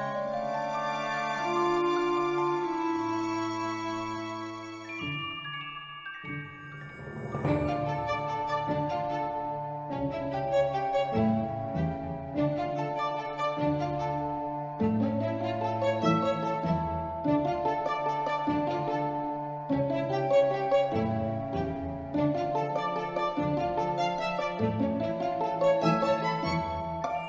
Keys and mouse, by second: 1.2-1.7 shift+middle drag, 2.1 shift+middle click, 2.7 middle click, 3.6-4.6 drag, 5.1 r, 5.4 z, 6.0 click, 6.3 s, 7.3 click, 7.6-8.7 middle drag, 9.9 middle click, 10.7 ctrl+middle click, 11.1 ctrl+middle click, 11.4 Tab, 11.8 3, 12.6 middle click, 13.6-15.4 drag, 15.7 Tab, 15.8-16.4 middle drag, 17.2 click, 19.2-19.5 middle drag, 19.9-20.3 ctrl+middle drag, 23.1-23.5 ctrl+middle drag, 24.3 y, 25.7 click.